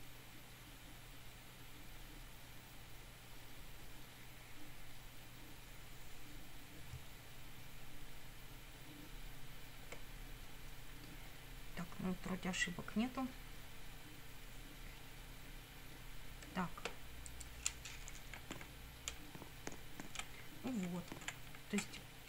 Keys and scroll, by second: 18.4 Up, 19.1 Down, 20.2 Right, 20.9 Up, 21.5 Right, 22.0 Left.